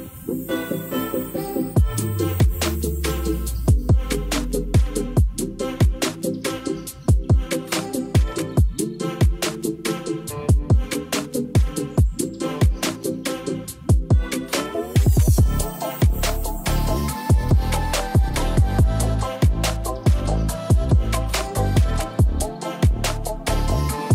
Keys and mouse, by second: 0.8 click, 1.7 ctrl+s, 2.7-3.9 drag, 5.2 click, 5.8 ctrl+a, 7.2 ctrl+s, 8.6 click, 9.4 drag, 10.0-12.1 drag, 12.9-13.7 drag, 17.9-24.1 drag.